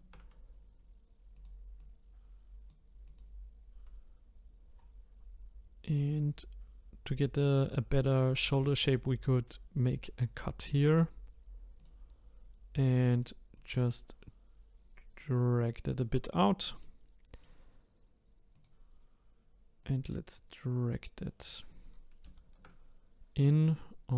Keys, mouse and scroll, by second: 0.5-1.3 scroll up 3, 1.3 click, 1.8 click, 3.0 click, 4.5-5.8 scroll down 1, 5.8-9.0 drag, 9.7-13.2 drag, 13.5 click, 16.8 middle click, 18.5 click, 19.8 click, 22.2 ctrl+z, 23.8 click.